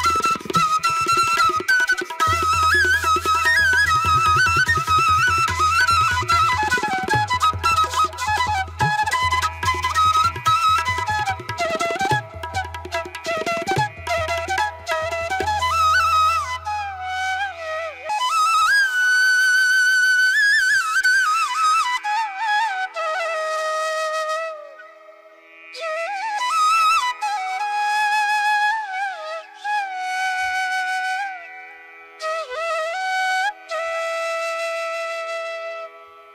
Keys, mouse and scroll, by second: 1.0 ], 4.5 ctrl+-, 5.0 ctrl+-, 5.2 space, 5.8 ], 6.3 ], 6.8 ctrl+-, 7.0 ctrl+alt+z, 7.3 ctrl+-, 7.8 ctrl+-, 8.0 space, 10.4 ctrl+-, 11.1 ], 11.3 ctrl+alt+z, 12.9 ], 14.0 ], 15.2 ], 15.6 ], 16.6 space, 16.8 ctrl+alt+z, 20.1 space, 23.7 ctrl+alt+z, 24.2 space, 27.6 ctrl+alt+z, 29.5 ctrl+=, 29.9 ctrl+-, 29.9 ctrl+=, 30.3 ctrl+=, 30.4 space, 33.0 ctrl+alt+z, 33.3 space, 34.8 space.